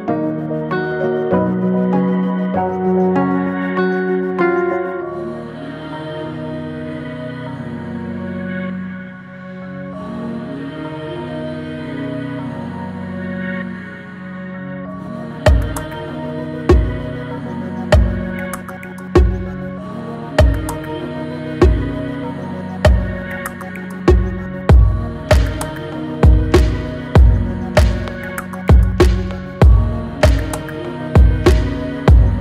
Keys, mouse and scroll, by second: 3.5-4.3 middle drag, 4.3-4.9 scroll down 1, 4.9-7.0 shift+middle drag, 7.0-7.6 scroll up 1, 7.6-8.7 middle drag, 8.7-9.3 scroll up 1, 9.3-10.1 shift+middle drag, 10.1-12.6 scroll up 1, 12.6 click, 13.1-18.9 middle drag, 19.2 alt+middle click, 19.9 shift+middle click, 20.4-21.0 scroll up 3, 21.0 shift+middle click, 21.5 scroll up 1, 22.4 shift+middle click, 22.9 scroll up 2, 23.6 click, 24.1 shift+click, 24.6 shift+click, 25.2 shift+click, 25.6-26.6 middle drag, 26.6-27.1 scroll down 3, 27.2 shift+middle click, 27.8 scroll down 1, 28.6 middle click, 29.3-29.7 scroll down 1, 29.7-32.0 middle drag, 32.0 e.